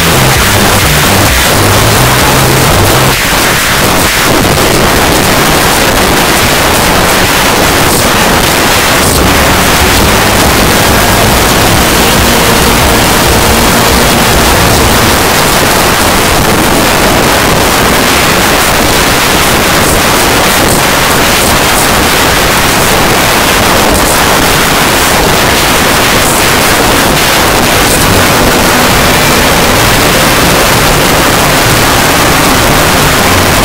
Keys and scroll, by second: 3.1 Page_Down, 15.1 Page_Down.